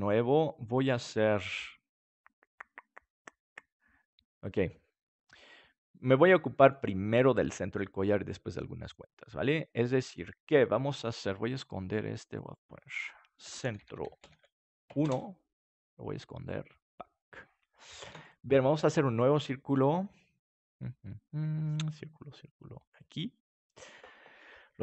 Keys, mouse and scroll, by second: 6.0-8.9 middle drag, 12.2-15.0 drag, 16.8-18.0 drag, 18.0 ctrl+s, 22.9-24.8 drag.